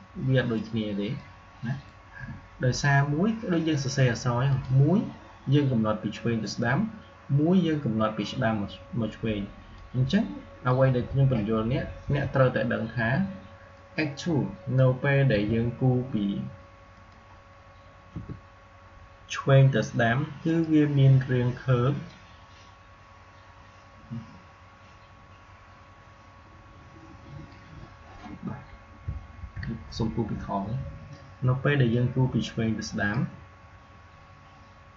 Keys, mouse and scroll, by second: 4.3 click, 6.8-8.9 scroll up 1, 8.9-9.6 scroll up 1, 9.6-11.9 drag, 11.9 Delete, 13.6-15.1 drag, 15.1 Delete, 16.8 click, 18.0 Delete, 20.3-29.3 drag, 29.3 ctrl+z, 31.7-34.9 drag.